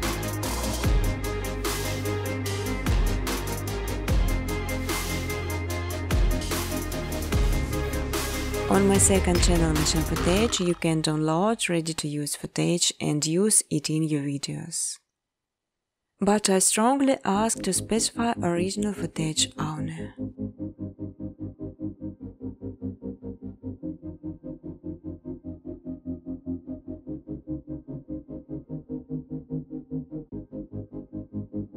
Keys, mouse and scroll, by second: 0.0-1.9 typing, 3.2 space, 3.8 space, 4.4 click, 5.7 click, 6.3 space, 7.0 space, 8.4 middle click, 8.4 middle click, 8.5 middle click, 8.6 scroll, 8.7 middle click, 9.4 click, 10.2-10.9 typing, 12.4-15.0 typing, 16.7 b, 19.0 click, 19.2 click, 19.2 typing, 21.3 click, 23.2 click, 24.2 click, 27.0 click, 27.5 click, 28.4 click, 29.6 click.